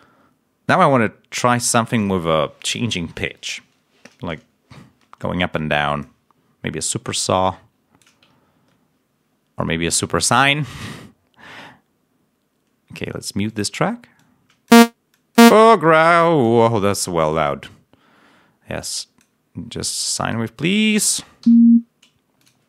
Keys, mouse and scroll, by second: 4.5 scroll down 2, 5.5 click, 7.4 click, 8.3 ctrl+scroll up 1, 13.4 click, 14.1 click, 21.4 l, 22.3 click.